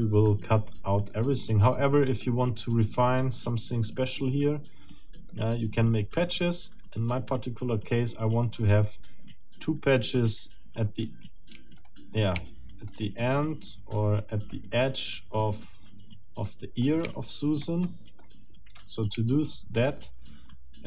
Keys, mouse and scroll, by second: 1.1 middle click, 2.2 middle click, 5.3-8.6 middle drag, 11.8 shift+middle click, 12.5 shift+middle click, 13.4-14.7 shift+middle drag, 16.5 middle click, 17.1 shift+middle click, 17.8 shift+scroll up 1, 18.2 shift+middle click, 19.3 shift+middle click, 20.7 shift+middle click.